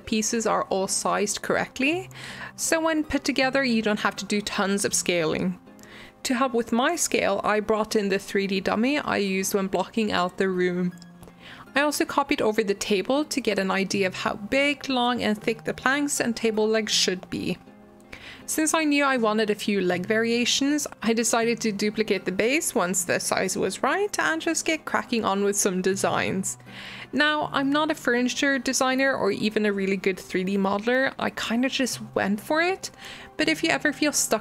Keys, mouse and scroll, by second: 1.0 shift+click, 1.3-3.7 middle drag, 4.8 shift+d, 5.8-6.4 shift+middle drag, 6.4-6.9 scroll up 3, 6.9-8.4 shift+middle drag, 8.4-9.1 scroll down 4, 9.1-9.9 middle drag, 9.9 click, 10.5 g, 12.0 scroll down 1, 12.1-12.5 middle drag, 12.5-13.0 scroll up 4, 13.0-15.4 middle drag, 15.7-16.3 middle drag, 16.3 click, 17.8 middle click, 18.0-22.0 typing, 19.9 shift+middle click, 21.3 scroll up 5, 21.6 middle click, 22.6-23.0 shift+middle drag, 23.0 shift+d, 24.1 shift+d, 25.0 click, 25.2-26.0 scroll up 1, 26.0 scroll up 1, 26.0 Tab, 26.2 middle click, 26.9 click, 27.1 g, 27.9 i, 28.5 e, 29.9-33.1 typing, 30.7 middle click, 31.8 middle click.